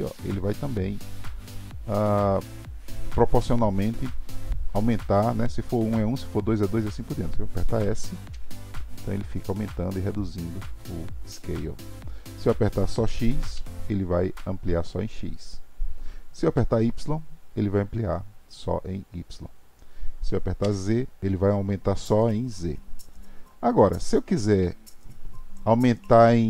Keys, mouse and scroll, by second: 8.3 s.